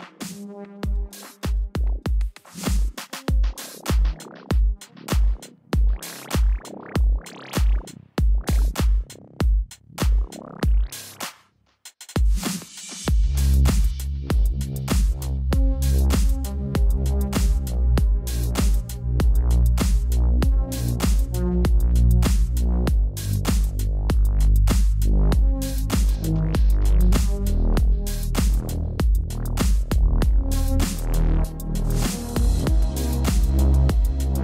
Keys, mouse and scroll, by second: 1.8 click, 4.9 click, 7.5 click, 13.1 click, 16.7 click, 19.5 z, 19.5 click, 25.0 right click, 26.3 click, 27.1 click, 29.5 Return, 30.2 ctrl+alt+click, 31.6 Right, 32.2 click, 32.9 z, 33.8 click.